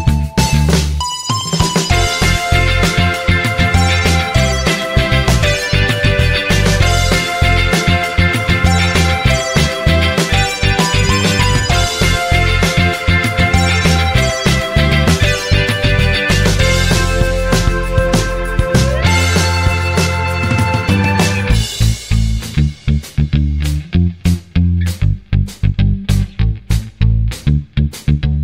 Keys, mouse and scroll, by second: 5.2-6.0 typing.